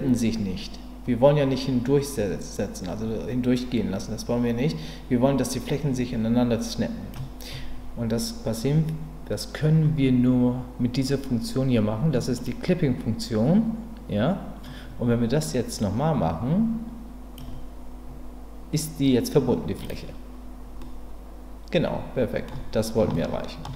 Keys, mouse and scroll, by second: 12.3 click, 15.8-17.3 drag, 19.0 click, 19.8 middle click, 19.8 right click, 20.8-22.5 middle drag, 23.1 shift+middle click.